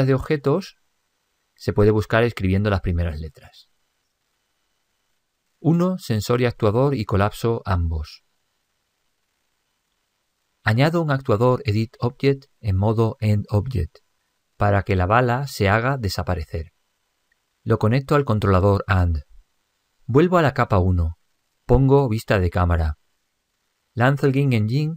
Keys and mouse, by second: 6.5 click, 8.9 click, 15.0 click, 18.5 click, 21.1 click, 24.8 p.